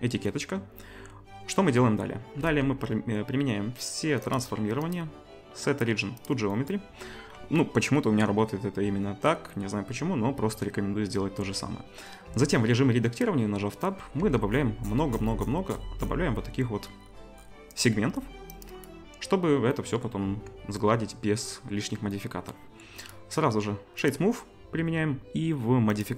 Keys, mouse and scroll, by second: 2.4 ctrl+a, 4.9-18.8 right drag, 12.3 Tab, 14.2 ctrl+r, 18.8-23.1 middle drag, 20.2 Tab, 23.1-26.1 right drag, 26.0-26.1 drag, 26.0-26.1 middle drag.